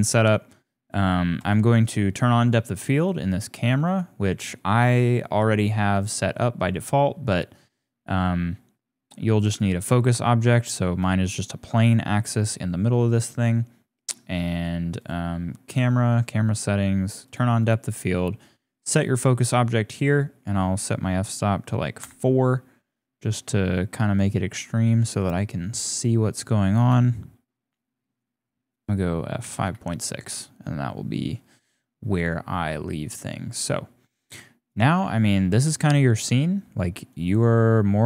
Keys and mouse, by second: 1.8 click, 3.6-6.1 drag, 10.0 click, 11.1 shift+click, 12.7 click, 14.6 click, 15.0 click, 17.2 click, 17.6 click, 20.1-22.1 drag, 25.6 click, 26.9 KP_0, 28.7 click, 34.0-34.7 drag, 35.1 ctrl+s, 37.1-38.0 drag.